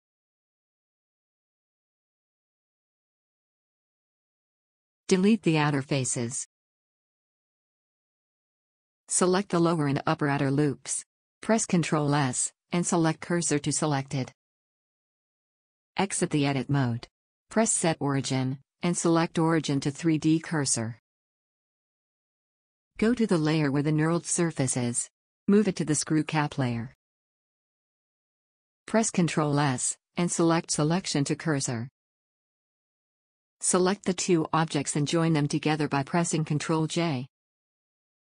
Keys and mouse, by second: 5.0 a, 6.4 click, 6.8 x, 9.3 click, 12.0 ctrl+z, 13.4 shift+s, 16.4 Tab, 20.7 KP_1, 24.4 right click, 25.2 m, 30.5 shift+s, 34.8 ctrl+j.